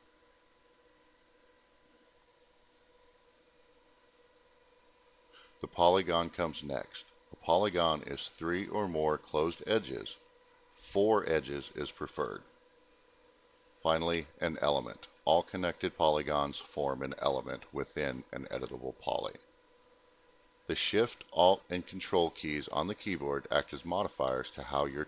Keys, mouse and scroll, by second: 4.4 click, 5.6 click, 6.5 click, 7.6 click, 8.3 click, 9.1 click, 9.9 middle click, 9.9-10.6 scroll down 2, 10.1 middle click, 10.7 middle click, 12.9 click, 13.9 click, 14.0 click, 15.4 alt+middle click, 19.1 click, 19.9 click, 20.1 click, 21.6 click, 22.8 ctrl+click, 24.2 alt+middle click.